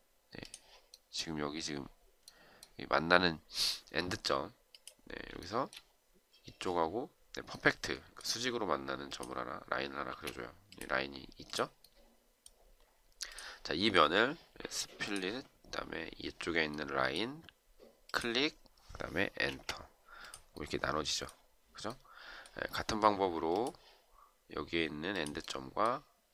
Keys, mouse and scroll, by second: 5.4 shift+right click, 10.0 space, 19.3 Return.